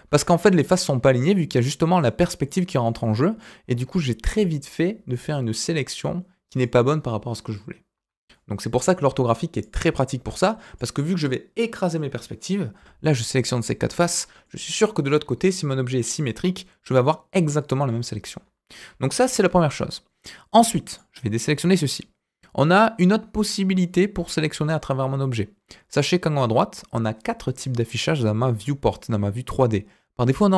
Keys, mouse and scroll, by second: 0.0 KP_1, 0.3 KP_5, 0.9 scroll up 1, 1.2 middle click, 2.4 click, 2.8 click, 3.9-6.6 middle drag, 7.9 KP_1, 9.0-9.5 scroll up 2, 9.5 click, 10.3 click, 14.2 scroll down 2, 14.4-17.8 middle drag, 18.7 KP_1, 20.9 click, 21.3-21.9 scroll up 2, 21.9 click.